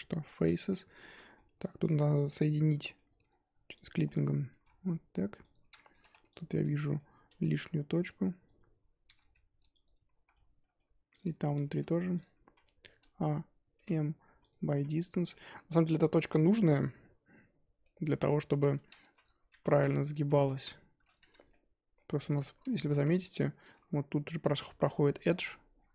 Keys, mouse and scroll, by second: 0.3 shift+click, 1.0 x, 1.2 middle drag, 1.4 2, 2.3-3.7 middle drag, 3.7 click, 4.0 middle click, 4.5 g, 6.0 1, 6.3 click, 6.5 middle click, 7.3 g, 9.0 g, 10.2 z, 10.3 middle click, 10.7-11.2 scroll down 1, 11.2 click, 11.6 g, 12.5 z, 12.6 middle click, 12.9 a, 14.5 m, 14.8 z, 14.9-18.3 middle drag, 18.3-19.1 scroll down 1, 19.1 z, 19.7 ctrl+z, 19.9 ctrl+z, 20.3 ctrl+z, 21.2 z, 21.5 middle click, 22.1-22.6 scroll up 2, 22.7 shift+middle drag, 22.9 z, 23.1-23.5 scroll up 1, 23.5 Tab, 23.7 click, 23.8 Tab, 24.4 2, 24.6 click, 24.9-25.7 middle drag, 25.7 scroll down 1.